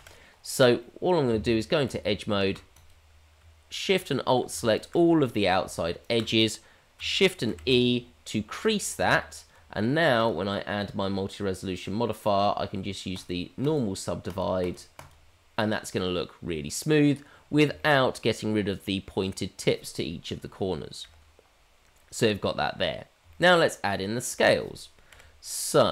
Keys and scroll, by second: 0.0 KP_Divide, 1.3 Tab, 7.5 shift+e, 9.0 Tab, 11.8 Tab, 21.0 KP_Divide, 25.0 KP_Divide.